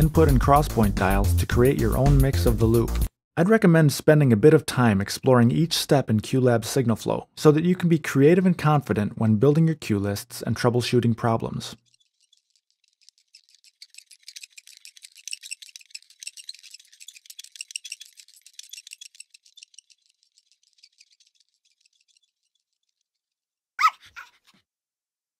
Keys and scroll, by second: 2.9 Escape.